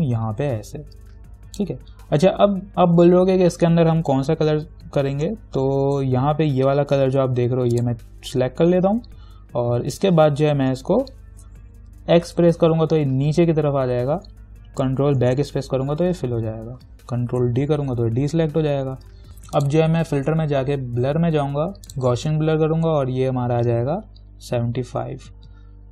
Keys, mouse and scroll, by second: 6.1 i, 7.9 click, 9.9 v, 12.5 x, 17.5 ctrl+d, 19.3 click, 22.1 click.